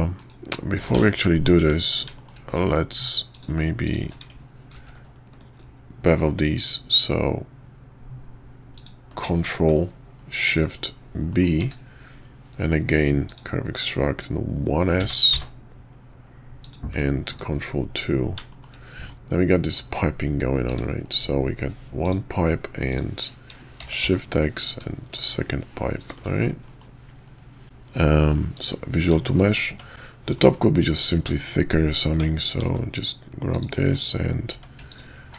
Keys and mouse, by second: 1.1 ctrl+z, 1.3 middle click, 1.6 Tab, 2.1 shift+click, 2.9 click, 3.3 click, 3.8 shift+click, 9.1 shift+click, 9.5 middle click, 10.2 KP_5, 10.5 Tab, 11.0-11.3 middle drag, 11.3 click, 11.6 q, 17.5 ctrl+2, 18.5 shift+click, 19.1-19.8 drag, 20.7 `, 21.0 KP_5, 22.0 click, 22.9 click, 23.8 shift+d, 26.6 click, 27.2 KP_5, 27.6 ctrl+a, 29.2 shift+click, 29.7 Tab, 30.3 middle click, 32.5 ctrl+r, 34.5 Tab, 34.9 alt+click.